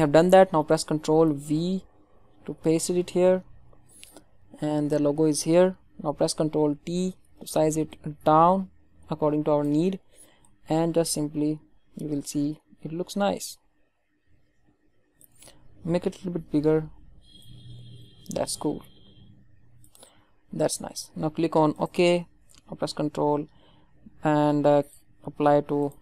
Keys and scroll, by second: 1.4 ctrl+v, 6.7 ctrl+t.